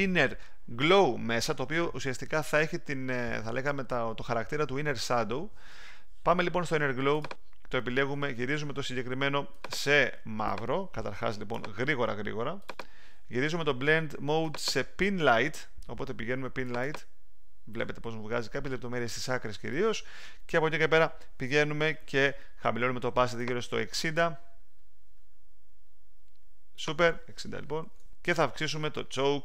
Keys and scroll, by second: 27.6-28.4 typing.